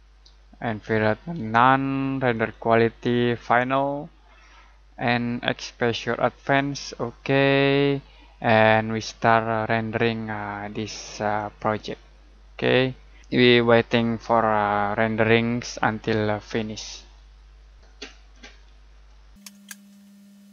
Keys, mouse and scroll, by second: 2.3 click, 11.3 click, 17.9 click.